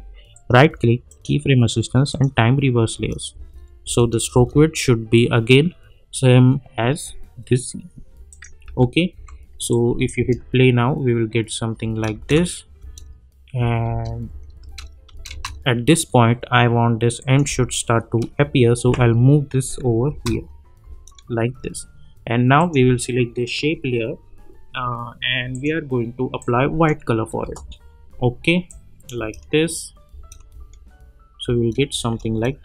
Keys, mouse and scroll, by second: 0.3 right click, 1.1 click, 2.9 space, 8.3 click, 8.6 u, 9.1 u, 9.7-10.3 click, 10.1 space, 17.2 click, 18.8 [, 20.1 space, 22.6 click, 25.5 click, 27.4 Return, 28.6-29.3 click, 29.1 space.